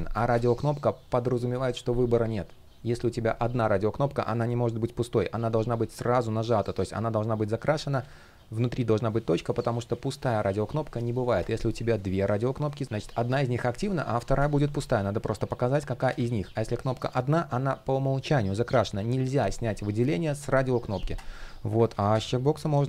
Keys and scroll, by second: 7.6 super+z, 15.7 super+z, 21.5 super+z.